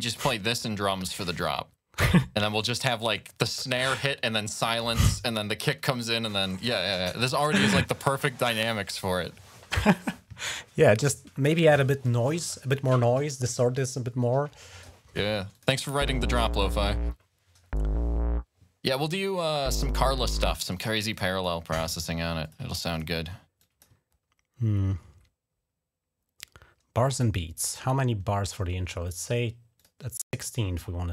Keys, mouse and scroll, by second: 4.0 ctrl+scroll down 2, 15.3 click, 15.5 space, 16.5-16.8 ctrl+scroll up 1, 19.7 ctrl+scroll down 2, 20.6 space, 20.9 click, 22.2 click, 22.7 click, 23.4 click, 23.9 ctrl+scroll up 1, 29.6 click.